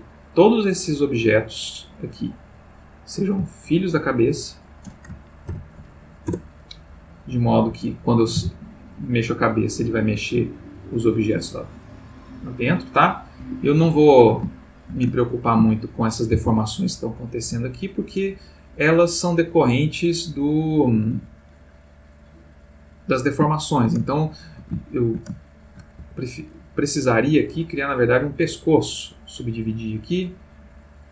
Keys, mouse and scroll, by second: 0.8-2.9 drag, 4.0 shift+click, 5.5 ctrl+p, 6.3 Return, 7.5 click, 8.3 r, 13.4 Escape, 14.0-15.5 ctrl+middle drag, 15.8-16.3 ctrl+shift+middle drag, 16.4 ctrl+shift+r, 20.9 Escape, 22.0 click, 23.5 shift+middle click, 24.1 ctrl+shift+middle click, 24.8-25.9 ctrl+shift+middle drag, 26.0 ctrl+shift+Tab, 27.4 click, 28.1 right click, 29.3 click.